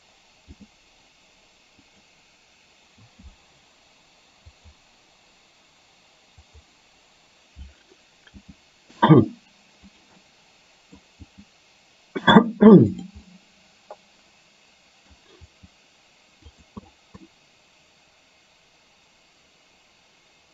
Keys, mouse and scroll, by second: 0.6 g, 3.2 i, 4.6 click, 6.6 click, 8.4 g, 10.4 middle click, 10.4 scroll up 1, 11.4 g, 13.2-15.2 middle drag, 15.5 g, 17.4-20.5 middle drag.